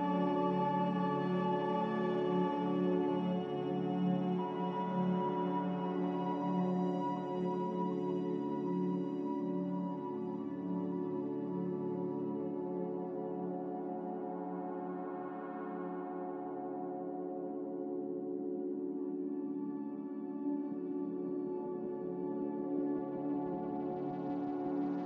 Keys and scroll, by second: 2.2 m, 5.2 Escape, 9.3 b, 10.2 a, 14.3 m, 15.5 typing, 15.9 Return, 19.9 ctrl+b, 23.0 ctrl+z.